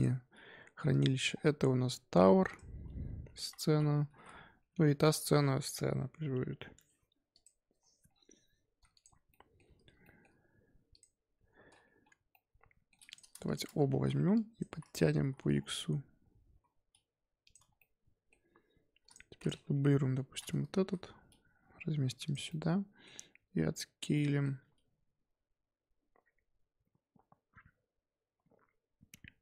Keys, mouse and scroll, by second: 1.3-1.9 scroll down 5, 1.9-2.4 scroll down 1, 2.4-5.1 drag, 8.1-8.9 scroll up 3, 8.9 click, 9.3 shift+middle click, 9.6-10.0 scroll up 3, 10.0-10.9 shift+middle drag, 10.9 click, 12.3-13.0 middle drag, 13.0 click, 13.4 shift+click, 13.7 Tab, 13.9 z, 14.1 1, 14.3 click, 14.6 z, 15.2 g, 17.5 Tab, 17.7-19.0 middle drag, 19.0 click, 19.4 click, 19.9 KP_7, 20.7 shift+d, 22.4-24.5 middle drag, 24.5 s.